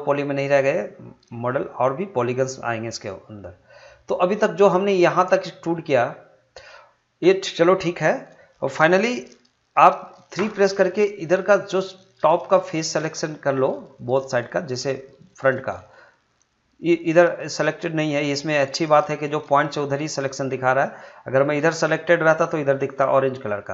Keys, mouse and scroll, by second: 10.3 3, 11.7-13.9 drag, 13.9-19.6 shift+drag.